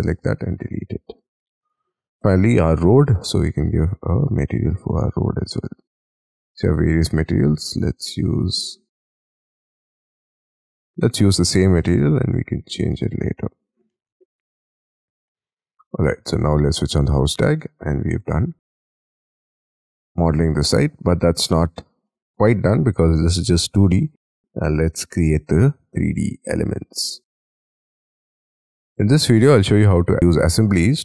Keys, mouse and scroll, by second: 0.1 Delete, 1.2 scroll down 5, 2.3 double click, 5.4-6.4 scroll down 4, 6.4-8.1 scroll up 1, 8.5-11.6 scroll up 1, 11.6-12.5 scroll up 2, 12.5-13.9 scroll up 1, 13.9 middle click, 14.1 scroll down 3, 14.1 space, 14.3 Escape, 14.5 Escape, 14.7-15.2 scroll down 4, 15.3 middle click, 15.8 scroll down 1, 16.1-17.4 scroll up 1, 17.4 middle click, 19.8 middle click, 21.1-21.7 scroll up 11, 22.0 shift+middle click, 24.1 scroll down 5, 26.3 middle click, 27.4-28.3 scroll up 10, 28.3 middle click, 28.9-29.6 scroll down 17, 30.0 middle click.